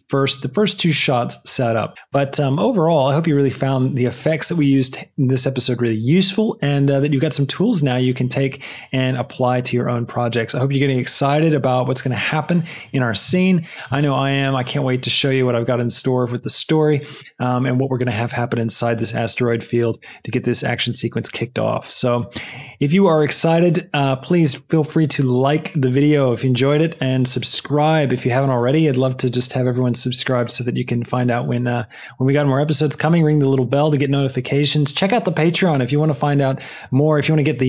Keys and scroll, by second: 14.4 space.